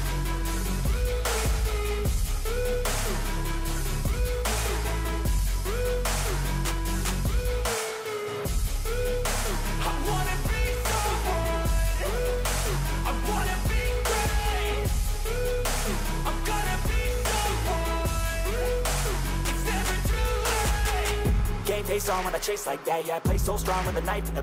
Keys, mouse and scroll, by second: 0.4 ctrl+-, 21.9-24.4 scroll down 65.